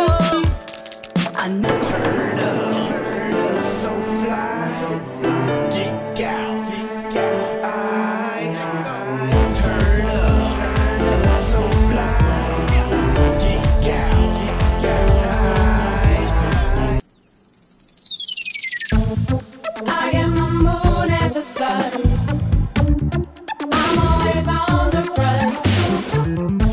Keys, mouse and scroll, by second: 0.1 click, 1.1 click, 2.9-3.3 drag, 3.8 click, 5.9 click, 6.1 click, 17.7 click.